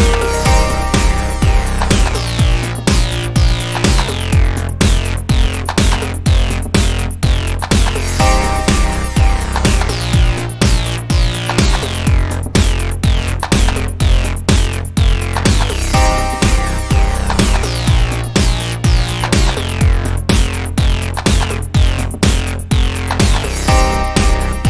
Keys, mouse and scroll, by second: 1.4-1.7 middle drag, 2.1 middle drag, 2.9 KP_1, 5.9 click, 6.2 click, 6.4 click, 9.6-11.1 middle drag, 11.1 a, 11.5 middle click, 11.7 middle click, 12.1-14.0 middle drag, 14.0 click, 15.7-16.0 right drag, 16.0 middle click, 16.9-18.7 right drag, 17.5 middle drag, 17.7 middle click, 18.2 click, 18.7 alt+d, 20.2 m, 23.4 click, 24.1-24.6 middle drag.